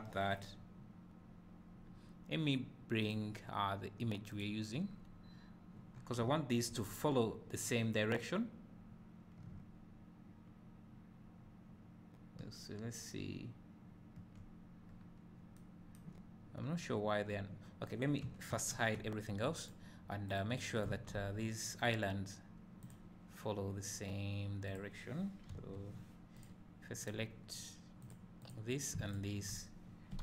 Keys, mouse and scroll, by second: 0.5 u, 3.2-16.3 drag, 5.9-6.2 scroll up 2, 6.9-9.5 scroll down 2, 14.9-15.5 scroll up 2, 17.1 `, 18.5 shift+h, 18.5-19.7 drag, 25.5 l, 26.5 click, 29.2 shift+click.